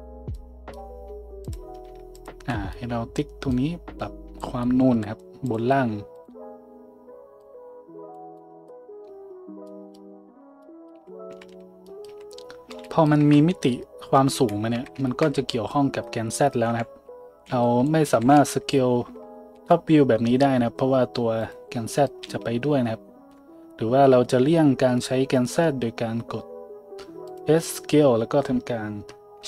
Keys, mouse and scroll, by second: 1.4 click, 2.1 ctrl+click, 3.6-5.5 drag, 5.5 middle click, 6.2 ctrl+middle click, 10.9-12.1 drag, 10.9-14.3 typing, 13.2 Tab, 13.2-15.2 drag, 14.7 Tab, 15.4 z, 16.7-19.5 typing, 17.5-29.4 drag, 22.2 s, 27.6 s.